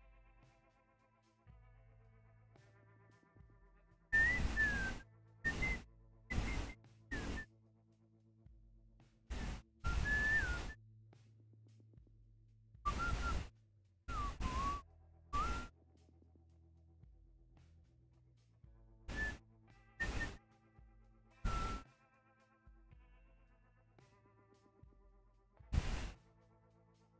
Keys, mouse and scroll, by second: 2.3 scroll up 1, 2.6-3.9 scroll down 1, 5.6 scroll down 1, 6.7-7.9 scroll up 1, 10.9-11.8 scroll up 1, 11.8-13.3 scroll down 1, 13.3-13.9 scroll up 1, 14.5-15.2 scroll down 1, 15.2-17.2 scroll up 1, 24.6-27.1 scroll down 1.